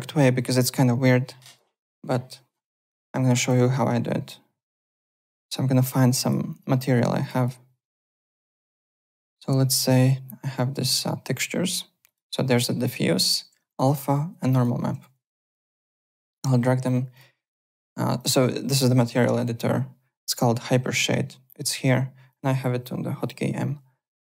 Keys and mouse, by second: 2.5 click, 3.4 click, 4.6 click, 6.2 click, 7.2 click, 12.0 click, 12.5 click, 13.6 click, 14.5 click, 16.0 shift+click, 17.1 click, 18.1 click, 22.3 click.